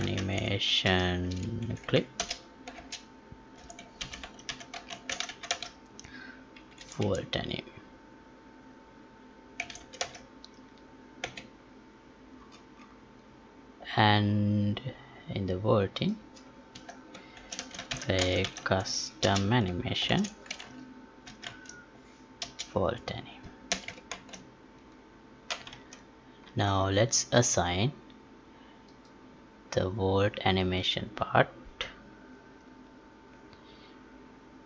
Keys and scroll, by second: 2.7 space, 24.1 ctrl+s, 25.9 alt+Tab.